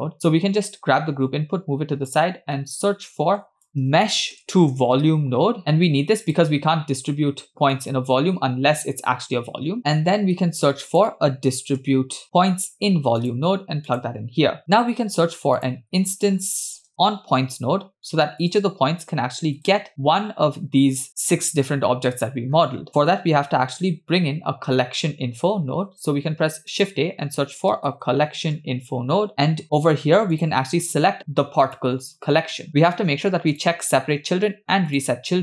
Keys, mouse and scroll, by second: 1.2 g, 2.4 scroll down 1, 2.6 middle click, 3.1-3.5 scroll down 2, 3.5 shift+a, 9.8 middle click, 10.5 shift+a, 14.9 shift+a, 22.4-23.1 scroll up 1, 23.1-23.6 scroll up 2, 25.7 shift+a, 28.3 l, 29.6 middle click, 30.3-31.9 drag, 33.6 click.